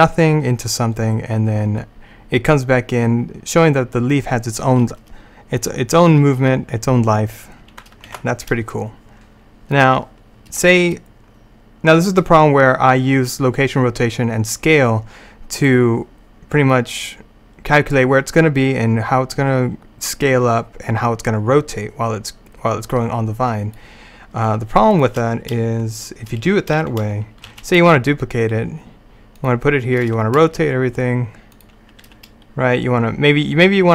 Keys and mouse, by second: 8.2 alt+a, 9.8-11.3 drag, 16.1-19.0 drag, 16.8 right click, 25.0-27.5 right drag, 27.5 shift+d, 30.1 r, 32.1 g.